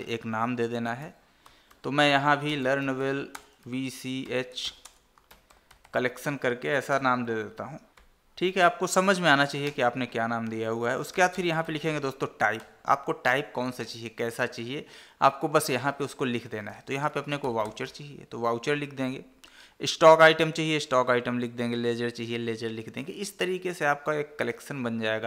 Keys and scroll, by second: 3.7 space, 5.2 space, 7.6 Left, 12.9 Tab.